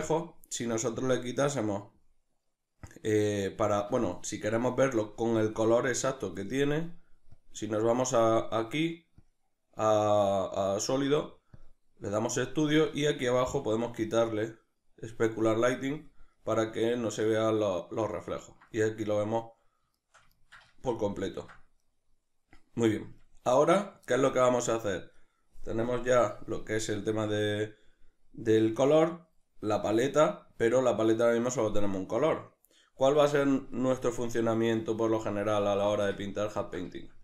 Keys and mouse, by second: 5.0-7.4 middle drag, 7.4-16.4 drag, 16.4-25.9 middle drag, 25.9-33.8 drag, 33.8-37.2 middle drag.